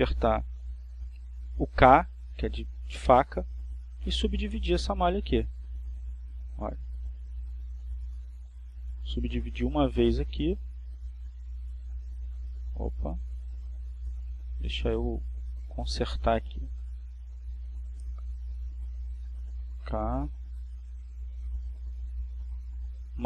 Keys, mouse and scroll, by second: 0.8 ctrl+z, 2.4 z, 4.8 k, 8.6 click, 15.4 ctrl+click, 17.2 ', 17.9 ', 18.5 click, 20.1 Escape.